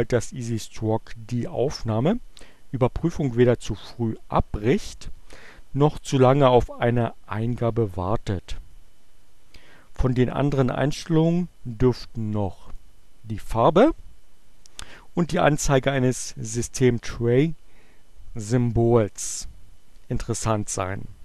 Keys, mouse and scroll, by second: 12.6 click.